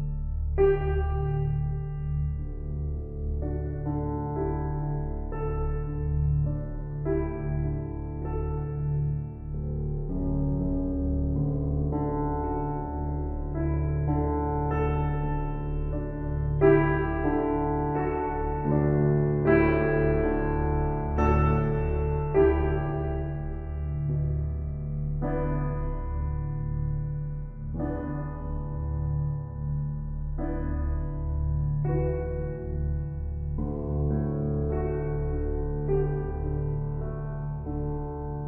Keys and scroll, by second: 6.1 ctrl+g, 24.6 ctrl+c, 29.4 ctrl+v, 35.4 ctrl+t.